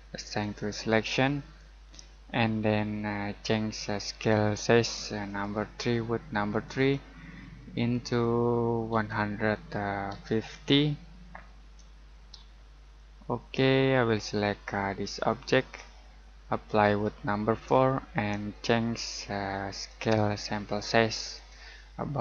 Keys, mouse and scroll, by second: 0.4 click, 5.2 click, 8.9 typing, 10.1 typing, 11.6 typing, 12.8 click, 16.6 right click, 17.5 click.